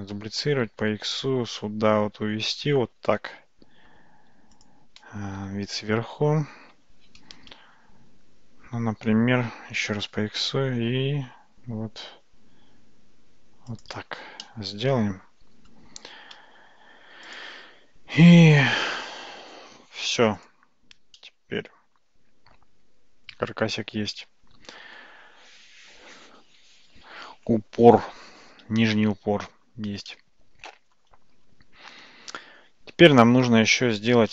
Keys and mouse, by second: 0.4 g, 5.5 `, 6.3 `, 9.9 g, 14.5-15.8 middle drag, 20.4 click, 21.2-25.0 middle drag, 26.8 ctrl+s, 30.2-31.0 middle drag.